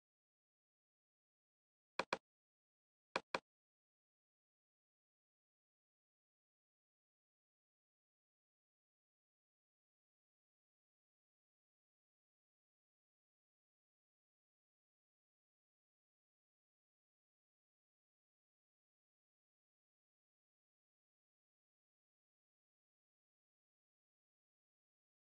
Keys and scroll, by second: 3.9-4.9 typing, 5.7 ctrl+BackSpace, 6.0 ctrl+space, 8.5 ctrl+alt+space, 10.8-15.3 typing, 16.9-21.4 typing, 22.6-25.3 typing.